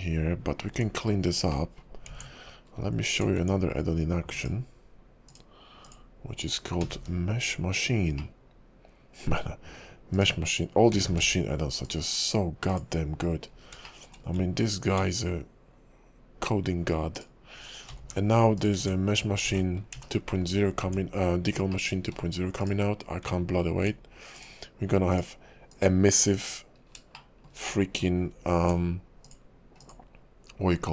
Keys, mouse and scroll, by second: 0.7 Tab, 1.5 middle click, 2.1 Tab, 2.6 scroll up 1, 3.3 Tab, 4.3 click, 5.3 click, 5.8 click, 6.8 g, 8.2 middle click, 10.1 click, 11.1 g, 12.7 click, 13.5 scroll up 2, 13.8 shift+middle click, 14.4 Tab, 17.1 click, 17.9 g, 18.7 Tab, 19.6 ctrl+z, 20.1 ctrl+z, 20.4 scroll down 3, 20.8 Tab, 21.7 middle click, 22.0 ctrl+z, 22.6 click, 23.3 Tab, 24.3 click, 25.1 click, 25.7 click, 26.4 click, 26.8 scroll up 3, 27.1 shift+middle click, 27.7 middle click, 28.1 Tab, 29.2 click, 29.8 click.